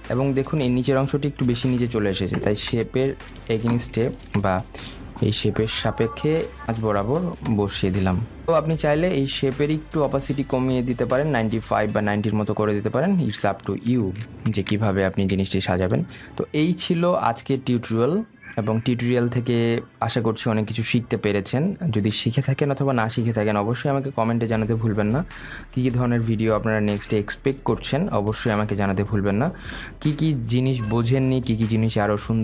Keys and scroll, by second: 3.0 ctrl+g.